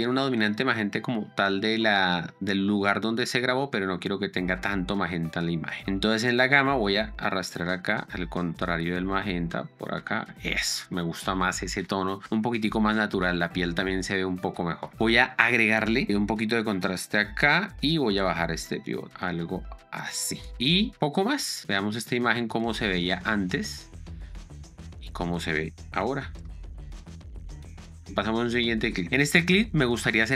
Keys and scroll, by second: 26.3 p, 26.7 space, 28.3 Down.